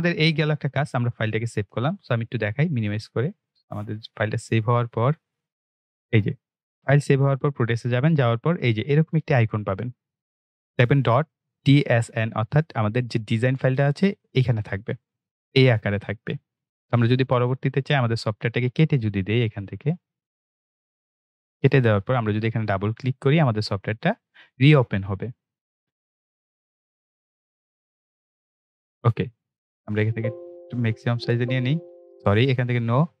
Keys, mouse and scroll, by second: 2.3-5.0 drag, 14.9 click, 19.4 click, 26.1 click, 30.0 click.